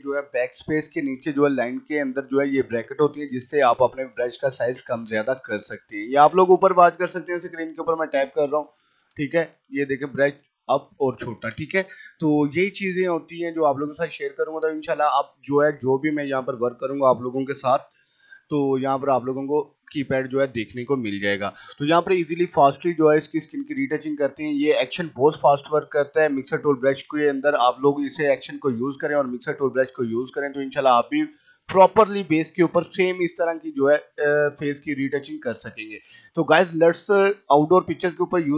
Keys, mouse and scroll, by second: 0.0-11.9 typing, 12.3-12.7 scroll up 1, 12.7 scroll down 1, 13.8 click, 18.3 ], 19.0-31.4 drag, 31.4 typing, 31.8 click, 32.9 [, 33.2 click, 34.2 scroll down 1, 34.4 [, 34.7 click, 35.9-36.7 typing, 36.1 click, 37.1 click, 37.9-38.5 typing, 38.3 click.